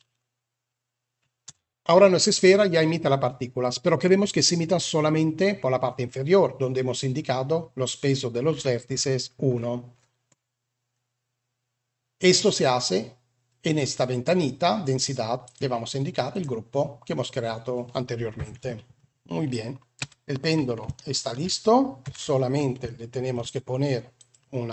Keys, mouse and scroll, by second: 1.4 space, 15.3-16.4 drag, 19.9 Escape, 20.8-21.2 shift+middle drag, 21.9 KP_1, 22.8-23.2 shift+middle drag, 24.1 click.